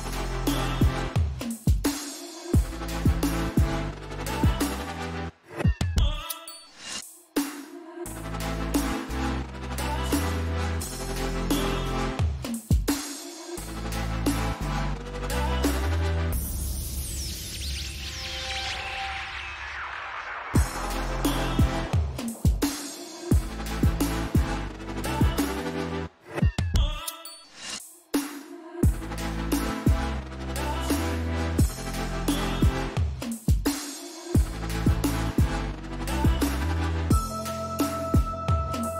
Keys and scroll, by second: 0.0-2.1 typing, 3.1-4.0 typing, 6.7 1, 11.7 ctrl+t, 14.1 BackSpace, 14.2 Return, 14.9 BackSpace, 15.1 space, 20.1 ctrl+t, 24.1-26.9 typing, 29.0 BackSpace, 29.3 b.